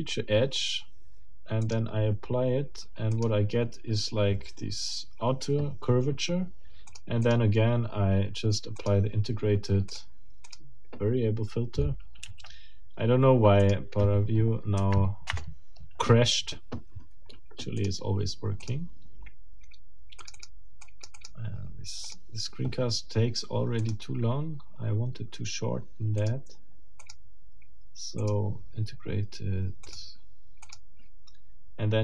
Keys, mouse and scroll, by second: 0.0 click, 1.6 click, 3.1 middle click, 3.4-6.9 drag, 6.9 middle click, 7.3 middle click, 8.8 click, 9.9 click, 10.5 middle click, 14.8 Up, 15.3 Return, 17.8 click, 18.6 click, 20.2 click, 20.8 click, 22.0 click, 23.8 click, 26.2 click, 27.0 click, 28.2 click, 29.9 click, 30.6 click, 31.8 scroll down 1.